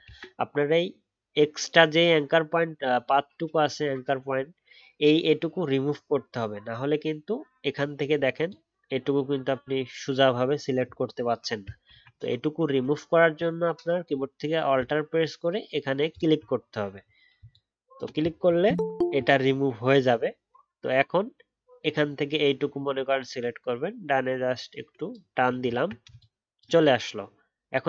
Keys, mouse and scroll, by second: 0.0 ctrl+z, 11.9 ctrl+z, 16.1 alt+click, 18.5 alt+scroll down 1, 18.9-21.9 alt+scroll up 1, 25.5-26.3 alt+scroll down 1.